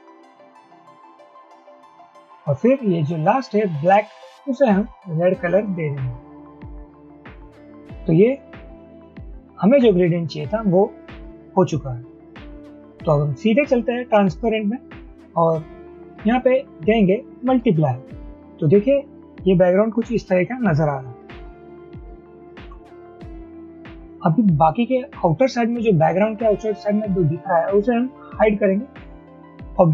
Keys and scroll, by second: 22.7 v.